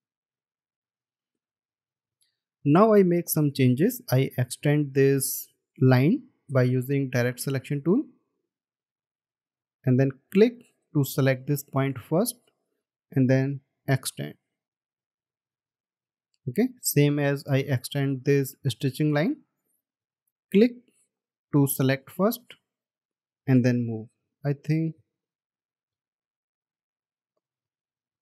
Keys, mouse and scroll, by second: 1.2-1.7 alt+scroll down 1, 2.0 space, 8.0-8.4 alt+scroll up 1, 8.7-9.2 alt+scroll up 1, 9.5 ctrl+z, 24.9 ctrl+z.